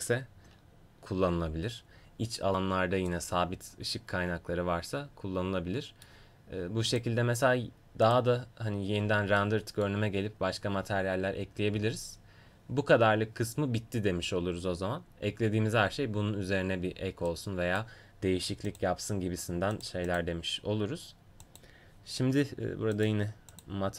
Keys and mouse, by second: 3.2-5.1 middle drag, 6.9-8.8 drag, 9.6-17.3 middle drag, 17.3-18.7 drag, 19.8-21.9 drag, 23.0 click.